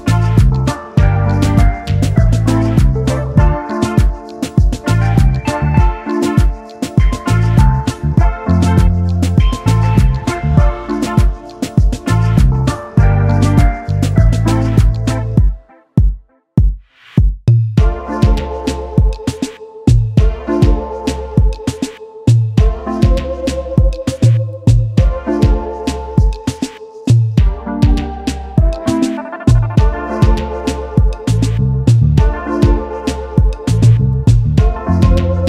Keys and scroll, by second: 5.3 space, 6.9 space, 8.9 ctrl+s, 11.8 s, 27.3 0, 27.6 Return.